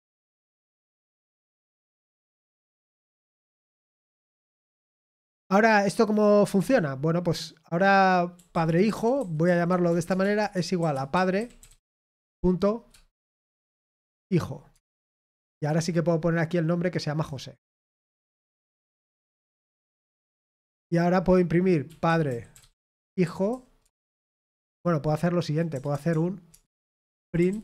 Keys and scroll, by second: 0.6-1.4 typing, 6.5 o, 9.1-12.2 typing, 13.9 typing, 18.7 Escape, 18.7 typing, 22.5-24.3 typing, 25.3-27.6 typing.